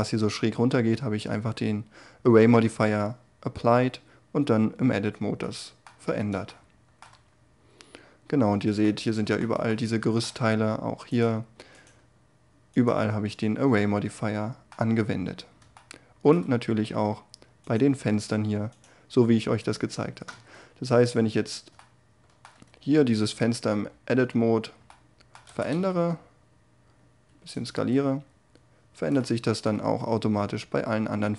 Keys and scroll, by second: 19.8 Tab, 21.7 Tab, 24.9 s, 25.6 y, 27.8 Tab.